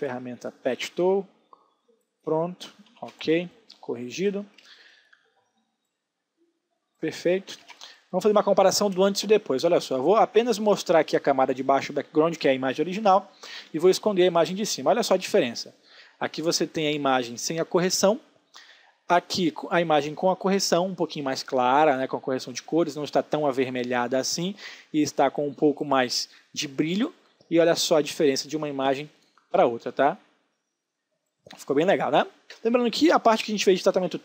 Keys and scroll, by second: 0.3 j, 2.9 ctrl+d, 3.1 space, 7.5 ctrl+d, 7.7 space.